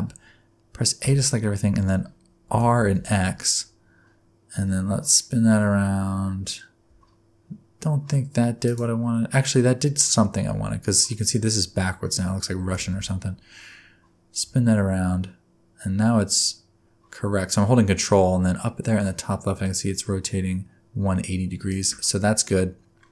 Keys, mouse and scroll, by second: 1.0 a, 2.5 r, 11.0-12.6 scroll up 3, 12.6 r.